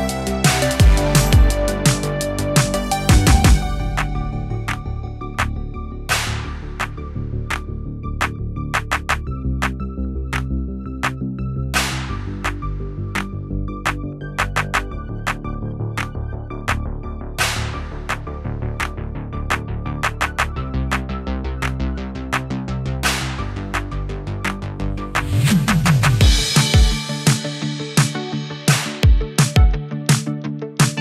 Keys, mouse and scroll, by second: 6.8 ctrl+d, 8.0-8.6 drag, 10.6 Return, 11.1 click, 11.4 BackSpace, 12.1 BackSpace, 12.3 Return, 13.6 typing, 14.5-17.3 drag, 28.1 space.